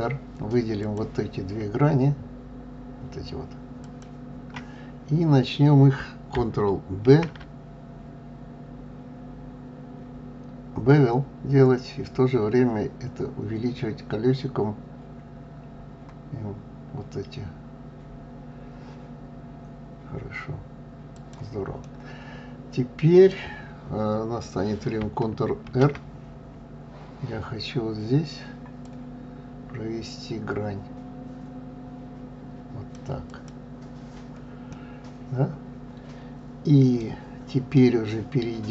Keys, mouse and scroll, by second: 0.7 click, 3.7 shift+click, 7.0 ctrl+b, 21.8-24.7 middle drag, 25.6 ctrl+r, 34.6-37.6 middle drag.